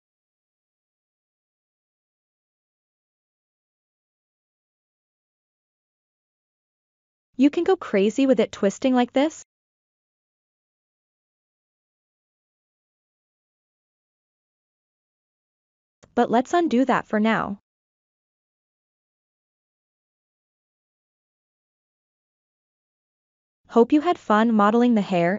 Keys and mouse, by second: 0.8 ctrl+t, 3.5 ctrl+t, 5.8-7.6 middle drag, 8.0 ctrl+t, 14.0-16.1 middle drag, 17.3 ctrl+z, 18.4-21.7 middle drag, 21.9 ctrl+z, 22.2 ctrl+z, 22.5 ctrl+z, 23.2-24.5 middle drag.